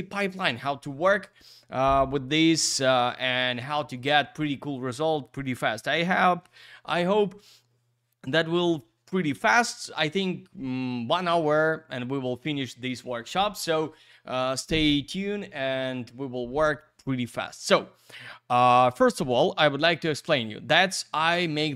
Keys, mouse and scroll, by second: 17.7 click.